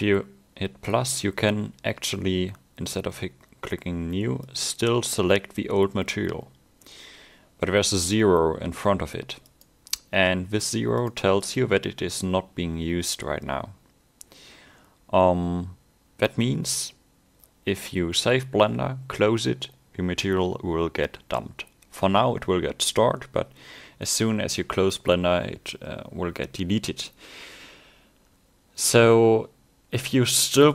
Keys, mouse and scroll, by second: 4.6 click, 11.0 click, 11.4 click.